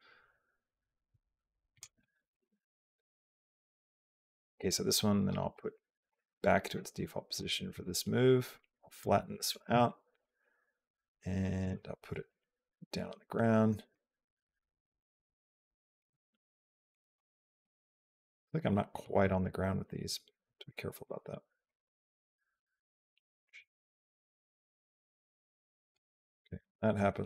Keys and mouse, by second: 2.1 click, 5.0-6.6 drag, 8.4-10.0 drag, 11.6-12.7 drag, 13.9-15.8 drag, 16.7 click, 17.0 g, 17.7 click, 18.0 g, 20.8 click, 21.5-25.8 drag.